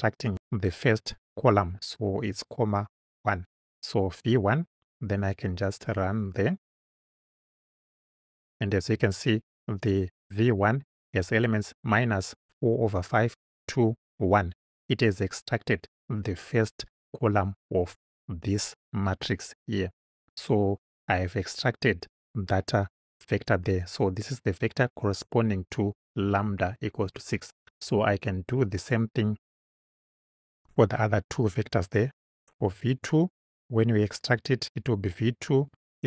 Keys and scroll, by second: 1.5 1, 31.0 Return, 32.6 v, 33.1 2, 35.7 =.